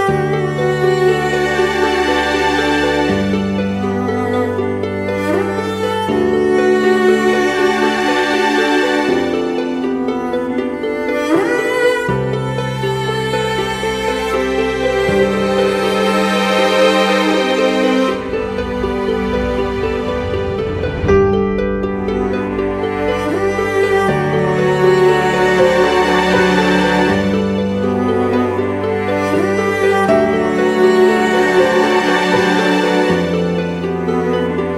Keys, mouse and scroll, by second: 2.1 Return, 11.9 shift+click, 13.2 shift+click, 27.7 ctrl+t, 29.2 alt+shift+click, 29.9 alt+shift+l, 33.5 alt+shift+click.